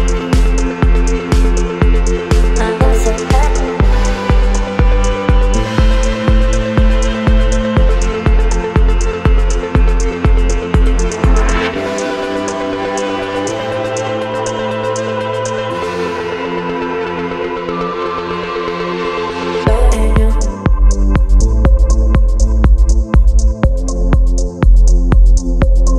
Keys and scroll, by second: 1.1 Return, 2.9 ctrl+t, 4.6 Return, 7.1 ctrl+t, 9.1 Return, 14.4 ctrl+t, 17.4 Return, 19.2 ctrl+t, 21.9 Return.